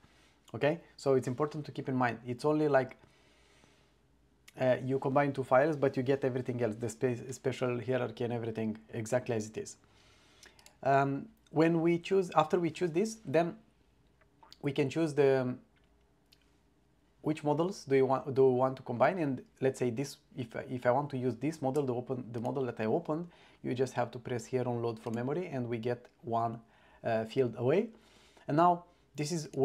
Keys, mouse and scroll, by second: 10.7 drag, 22.4 click, 25.1 click, 29.5 click.